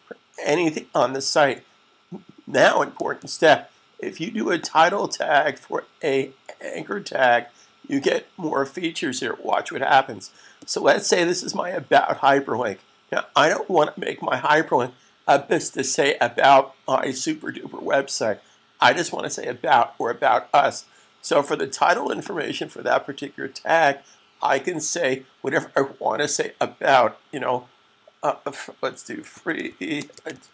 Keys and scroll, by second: 28.7-30.5 typing.